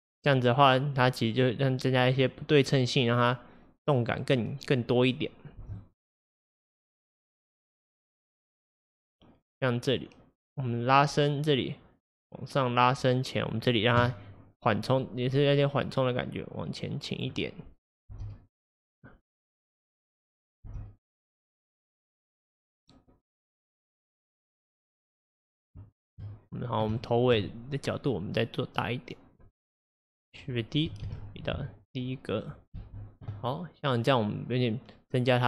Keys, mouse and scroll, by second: 5.7 space, 5.8-8.8 drag, 15.0 click, 18.1 space, 20.7 space, 21.3-24.4 drag, 25.2 scroll down 1, 25.9 shift+middle click, 26.5-27.0 scroll up 2, 27.0-28.5 shift+middle drag, 28.5 click, 30.0-31.1 drag, 31.1 shift+d, 32.8 space.